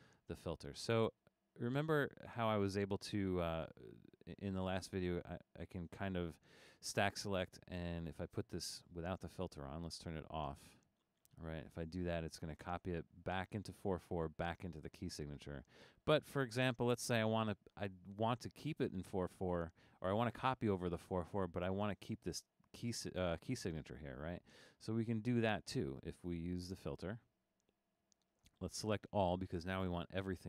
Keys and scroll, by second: 15.0 super+z.